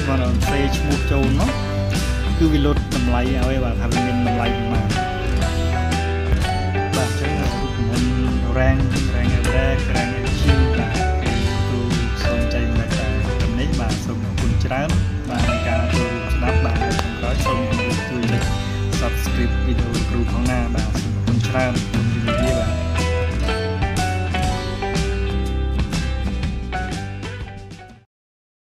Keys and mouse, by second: 0.5 ctrl+click, 1.6 click, 2.3 click, 3.5 ctrl+click, 4.3 ctrl+click, 5.5 ctrl+click, 6.5 ctrl+click, 7.4 ctrl+click, 10.1 click, 10.8 click, 12.2 click, 14.5 click, 17.2 ctrl+click, 18.4 ctrl+click, 19.9 ctrl+click, 22.0 click, 22.9 click, 23.5 click, 24.9 click, 27.2 click.